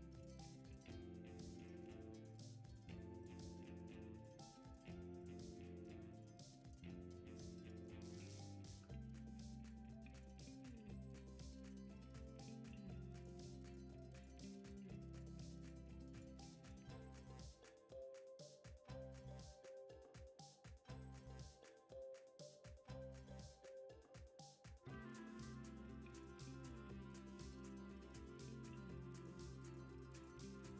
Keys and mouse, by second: 1.7 Tab, 3.2 o, 3.8 s, 7.3 s, 8.6 Tab, 9.3 g, 10.7 click, 10.9 Tab, 11.5 click, 12.2 g, 13.8 alt+z, 14.4 click, 14.7 alt+z, 15.1 s, 16.2 Tab, 16.6 click, 17.0-17.5 middle drag, 17.8 click, 18.3 alt+z, 18.7 alt+z, 19.1 s, 20.3 Tab, 21.1 KP_1, 22.0 r, 22.8 g, 24.2 middle click, 27.1 KP_1, 28.4 g, 29.6 click.